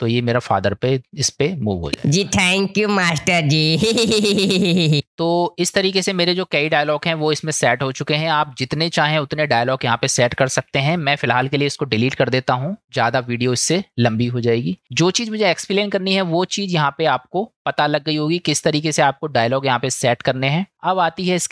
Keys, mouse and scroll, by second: 1.9 space, 5.0 space, 11.4 Delete, 13.2-14.4 middle drag, 16.6 middle click, 18.7-20.7 middle drag.